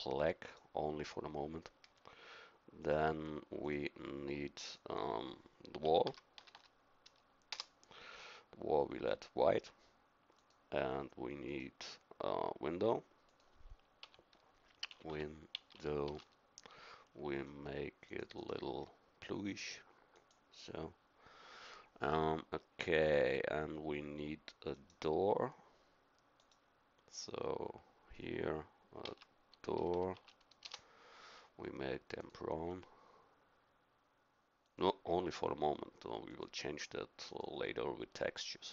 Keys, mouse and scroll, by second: 6.5 l, 10.3-16.9 drag, 24.7-29.9 right drag, 29.9 o, 32.1 click, 38.5-38.7 middle drag.